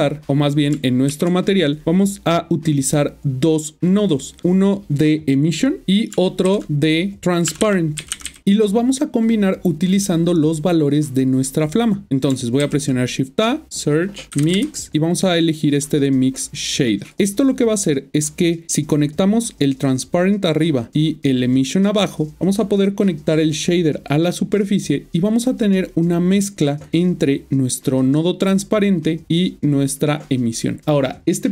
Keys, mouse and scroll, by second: 0.7-1.1 typing, 4.4 click, 6.9 click, 8.0 typing, 8.4 click, 12.6 shift+a, 13.2 click, 14.3 typing, 17.0 click, 18.4-18.9 scroll up 7, 28.9 click.